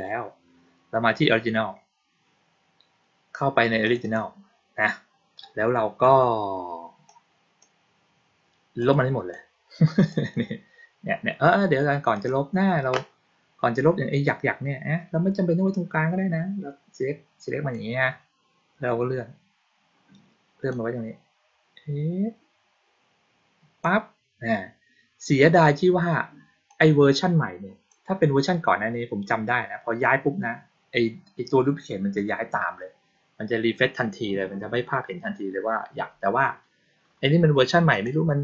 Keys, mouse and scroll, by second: 3.7 click, 3.9 click, 6.9-7.5 drag, 8.7 click, 9.2-10.0 drag, 12.0 click, 15.6-17.6 drag, 20.6-23.7 drag, 26.5-27.7 drag, 37.8 click.